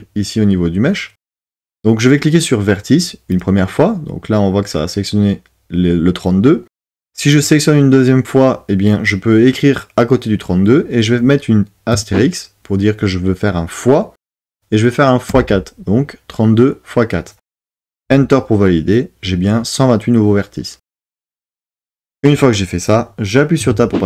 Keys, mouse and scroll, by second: 3.4-18.0 drag, 23.6 Tab.